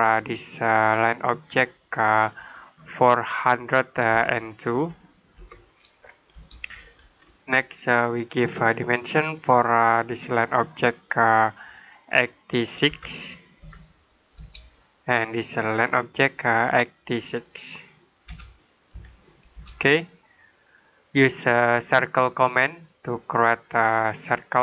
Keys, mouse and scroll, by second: 4.0-5.2 typing, 6.2 Return, 6.8 scroll down 1, 7.0-7.9 scroll up 1, 7.9 middle click, 8.4-10.1 scroll down 1, 10.1 click, 12.7-13.5 typing, 14.2 Return, 15.7 click, 18.1-18.8 typing, 19.4 Return, 20.3 middle click, 22.2 click.